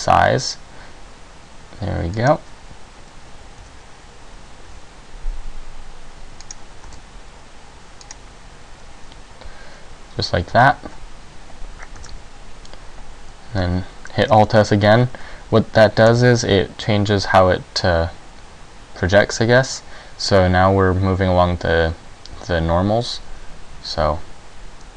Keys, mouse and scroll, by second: 2.4 click, 4.8 s, 6.6 click, 7.0 alt+s, 8.2 click, 10.6 e, 12.1 s, 16.2 alt+s.